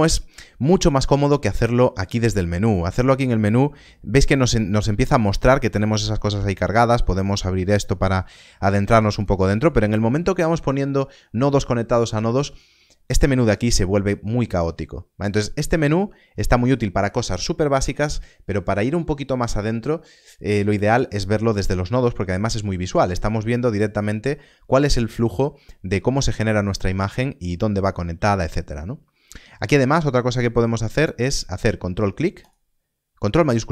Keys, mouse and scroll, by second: 6.6 click, 9.1 click, 27.1 middle click, 30.1 ctrl+s, 32.4 ctrl+shift+click.